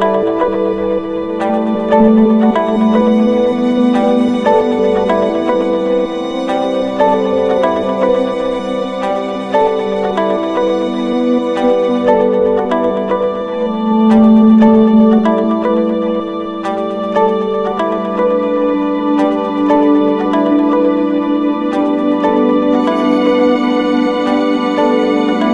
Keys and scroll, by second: 5.0 ctrl+-, 10.4 ctrl+=.